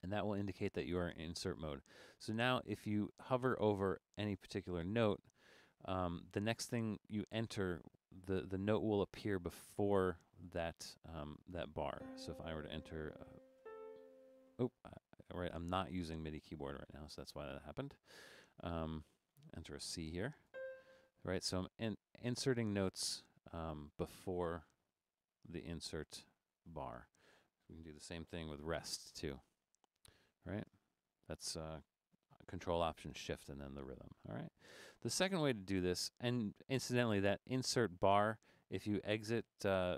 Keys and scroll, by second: 0.9 Left, 3.3 Left, 13.6 5, 17.4 Up, 18.6 Up, 20.7 5, 21.6 Left, 22.3 Left, 22.9 Left, 24.7 Left, 25.1 BackSpace, 26.2 Left, 26.5 BackSpace, 29.5 ctrl+alt+shift+5, 30.7 ctrl+alt+shift+5, 33.7 Left, 33.9 Left, 34.1 Left, 34.5 Left, 34.9 Left, 35.5 BackSpace, 36.0 BackSpace.